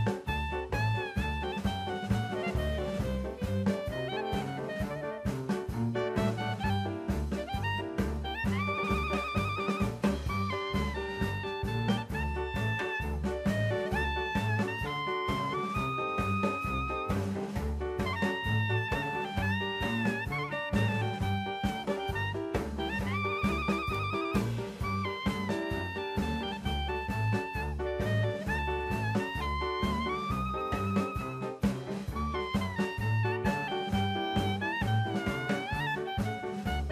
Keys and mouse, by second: 2.2-3.1 right drag, 3.5-3.9 shift+middle drag, 4.4 KP_1, 6.4-7.3 drag, 8.7 Tab, 10.3 ctrl+r, 11.8 click, 12.3 ctrl+r, 13.5 click, 13.8 Tab, 14.2-14.5 middle drag, 15.0 KP_1, 15.8 shift+middle drag, 16.3 shift+a, 20.1 click, 21.0-22.2 drag, 22.9 click, 23.3 click, 25.0 click, 25.7 Tab, 26.6 alt+z, 27.5 shift+middle click, 28.6 3, 29.6 click, 31.1 x, 32.0 middle click, 36.1 shift+middle click.